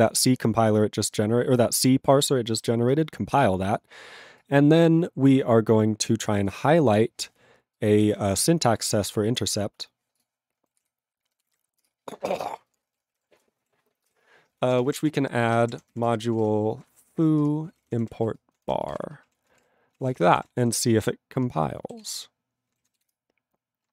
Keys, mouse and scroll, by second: 10.2 scroll up 1, 10.3 click, 11.9 ctrl+Return, 12.8 ctrl+space, 13.2 alt+>, 13.6 ctrl+w, 14.2 ctrl+/, 14.8 alt+<, 15.0 ctrl+o, 15.4-19.6 typing, 20.0 ctrl+p, 20.0 ctrl+a, 20.1 ctrl+space, 20.2 ctrl+n, 20.4 ctrl+e, 20.4 ctrl+g, 20.9 ctrl+s, 21.7 ctrl+n, 22.0 ctrl+s, 23.2 Return.